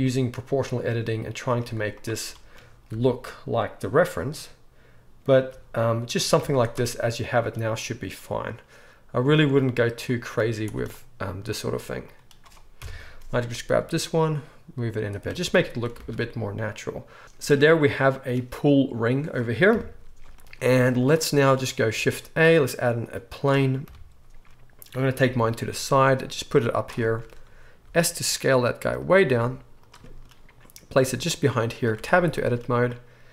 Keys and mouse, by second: 1.6 z, 2.9 r, 5.5 g, 6.4 z, 9.3 z, 10.4-11.5 drag, 10.4 z, 11.5 middle click, 12.1-16.0 drag, 12.7 KP_1, 13.7 g, 15.2 Tab, 16.0 alt+a, 16.0-18.0 alt+right drag, 18.0-23.3 drag, 19.7 KP_1, 20.7 z, 22.0 shift+a, 23.3-27.9 right drag, 23.9 KP_3, 25.2 g, 27.9-32.9 drag, 27.9 s, 29.3 s, 31.0 g, 32.0 Tab.